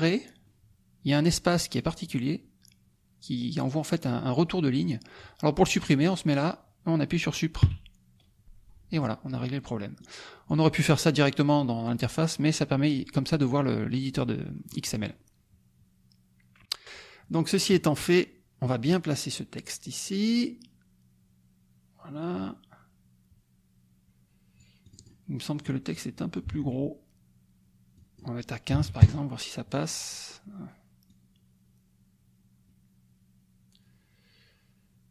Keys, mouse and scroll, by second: 1.8-5.3 drag, 6.0 click, 7.6 Delete, 10.0 click, 14.2 middle click, 17.5 click, 17.7 right click, 18.6 middle click, 19.3-25.2 drag, 25.7 click, 26.5 ctrl+a, 27.9 click, 28.7 KP_1, 28.8 KP_5, 29.1 KP_Enter, 31.1-35.1 drag.